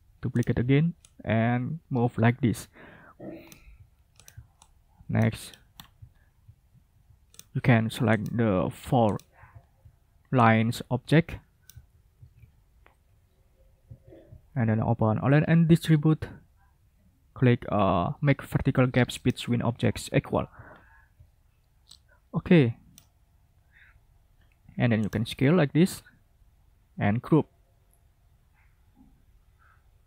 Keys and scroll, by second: 12.1 ctrl+z, 14.2 ctrl+shift+a.